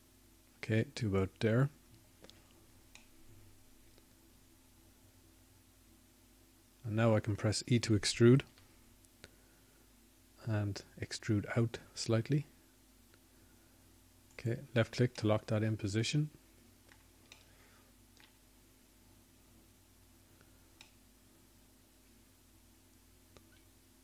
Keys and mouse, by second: 8.9 middle click, 14.6 e, 20.6-22.1 middle drag.